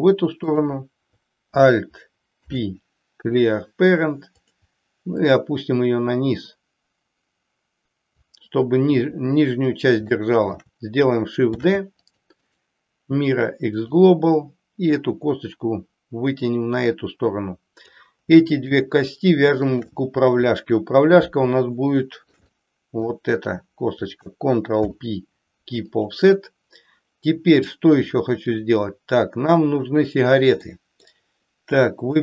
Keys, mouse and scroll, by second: 0.4 click, 2.3 alt+p, 5.0-8.2 drag, 10.0 shift+middle click, 11.5 shift+d, 12.4-13.9 right drag, 15.1-17.9 drag, 18.4 shift+click, 19.7 shift+click, 21.9-23.2 shift+middle drag, 24.8 ctrl+p, 28.0 click, 29.4 click, 30.7 middle click.